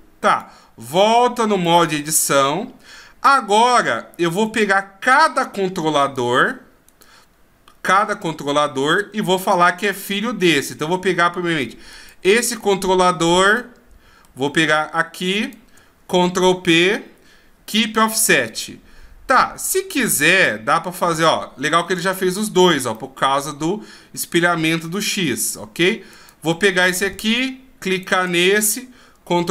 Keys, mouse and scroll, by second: 1.8 click, 2.3 middle click, 4.4 right click, 6.0 right click, 6.9 right click, 9.4 right click, 11.9 right click, 13.5 middle click, 15.5 shift+right click, 16.7 ctrl+p, 19.3 middle click, 22.9 middle click, 26.1 right click, 27.9 shift+right click, 29.3 ctrl+p.